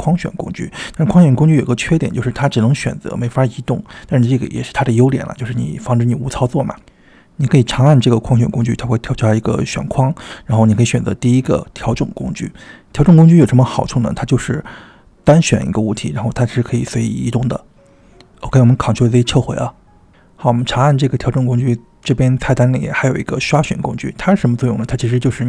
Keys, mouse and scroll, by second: 3.9-4.3 drag, 4.5 drag, 4.9-5.3 drag, 5.3-5.7 drag, 6.0 drag, 6.4 click, 6.9-7.3 drag, 8.6-12.3 drag, 13.2 click, 14.0 click, 14.3 click, 14.9 click, 15.3 click, 15.9 drag, 16.5 click, 17.4 click, 18.4-19.0 ctrl+z, 19.3 click, 20.4 drag, 23.0-25.2 drag.